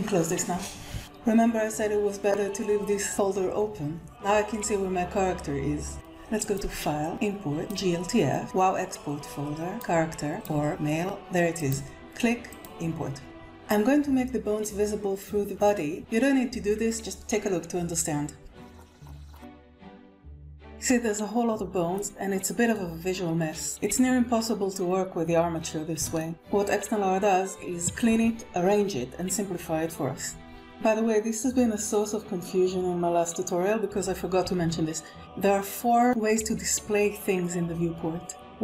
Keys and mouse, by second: 7.6 click, 18.0 click, 18.4-18.7 middle drag, 19.3 alt+z, 19.5-21.1 middle drag, 21.9-22.8 middle drag, 25.3-25.7 shift+middle drag, 30.4 KP_1.